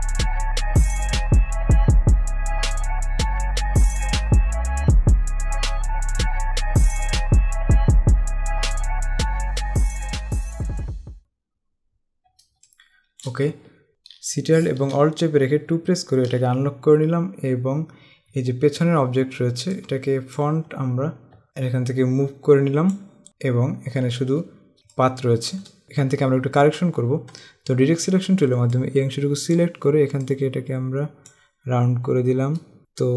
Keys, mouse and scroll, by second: 0.5 click, 1.1 Escape, 1.1 click, 1.5 click, 2.0 click, 2.3 click, 2.4 click, 3.0 space, 3.6 click, 4.2 Escape, 4.3 click, 4.6 click, 5.1 click, 5.3 click, 5.6 ctrl+z, 5.8 click, 6.1 ctrl+z, 6.3 click, 7.0 click, 7.2 ctrl+z, 7.4 click, 8.4 click, 9.4 z, 9.6 click, 9.9 click, 10.2 z, 10.3 click, 10.6 click, 10.9 Escape, 12.8 click, 13.1 space, 13.7 scroll down 1, 18.5 scroll up 1, 19.9 click, 20.9-21.2 scroll down 1, 21.5 click, 23.3 scroll up 1, 25.1 click, 25.4 space, 28.9 click, 32.8 space.